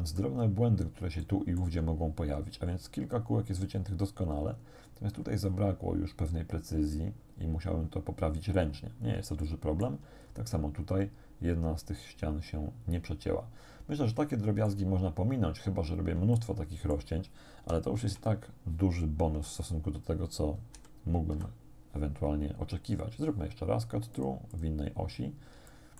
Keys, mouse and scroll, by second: 1.3 shift+click, 4.7 middle click, 4.9-5.7 scroll up 2, 8.6-9.3 scroll down 2, 9.5 shift+middle click, 10.3 shift+scroll up 1, 13.6 scroll down 2, 14.3 shift+middle click, 14.9 shift+scroll down 2, 15.7-16.3 scroll down 4, 16.4 shift+middle click, 18.0 1, 20.8 6, 24.2 click, 24.4 middle click, 24.6 middle click, 24.7 click, 25.7 shift+click.